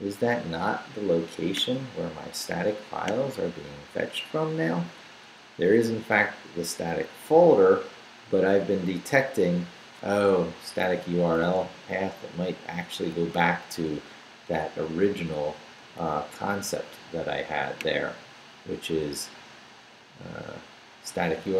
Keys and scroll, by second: 10.5 Left.